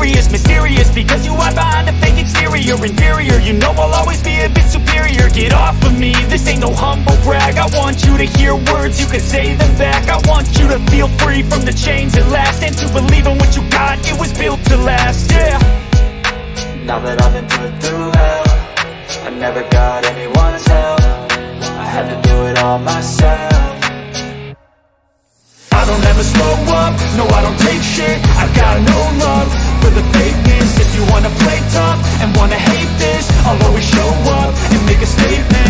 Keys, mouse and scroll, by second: 2.1 click, 4.2-5.2 drag, 7.4 click, 14.7 click, 18.1 click, 19.0 click, 21.6 shift+click, 23.8 click, 25.0 click, 27.1 click, 29.7-30.8 drag, 30.8 middle click.